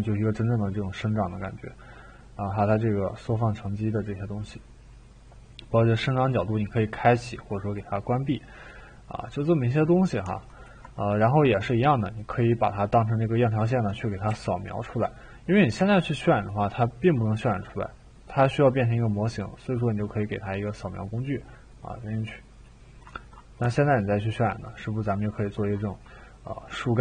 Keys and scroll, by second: 14.3 t, 15.7 e.